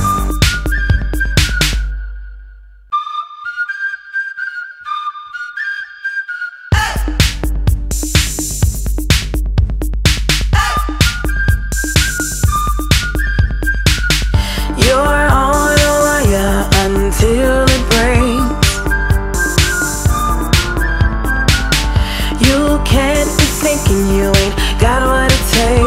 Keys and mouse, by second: 0.4 click, 2.1 click, 2.2 click, 4.1 click, 20.5 click, 21.5 p, 24.3 click, 25.6 click.